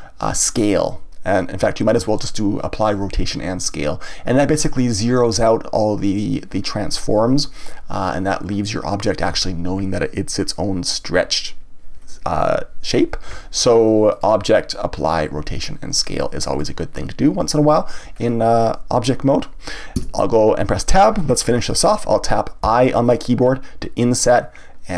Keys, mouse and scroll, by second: 14.1-17.1 drag, 18.1 scroll up 1, 20.0 Tab, 22.6 i.